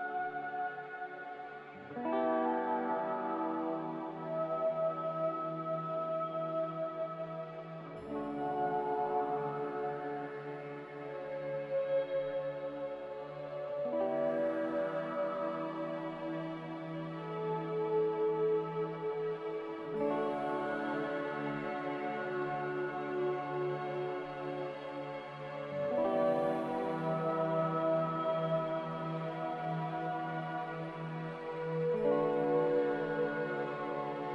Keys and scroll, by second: 17.8 ctrl+z.